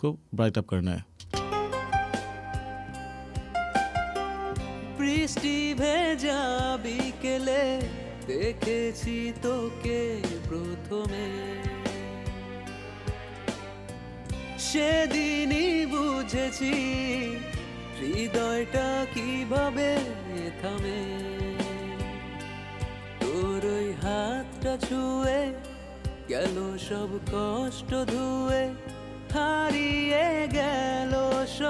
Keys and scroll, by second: 1.2 space.